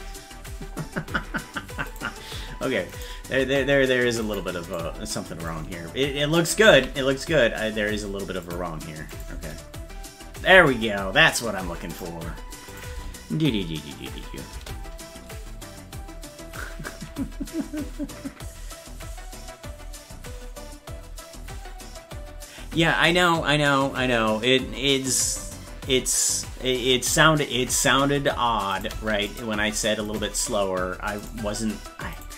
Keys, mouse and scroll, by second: 1.9 right click, 2.9 right click, 3.4 c, 5.5 click, 6.8 s, 9.1 click, 9.4 space, 12.0 right click, 12.7 click, 12.9 space, 29.4-31.3 shift+right drag, 32.1 right click.